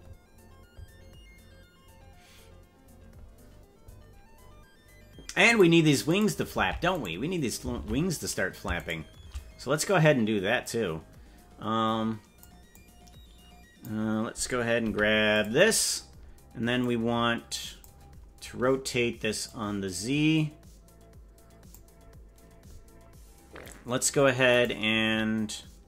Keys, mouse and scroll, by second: 4.3 scroll down 4, 5.5 right click, 6.1 right click, 6.5 ctrl+Tab, 6.9 right click, 7.7 ctrl+Tab, 8.9 shift+right click, 10.6-12.4 drag, 12.7-13.8 drag, 14.8 i, 16.8-17.8 drag, 19.4-21.7 drag, 24.5 right click.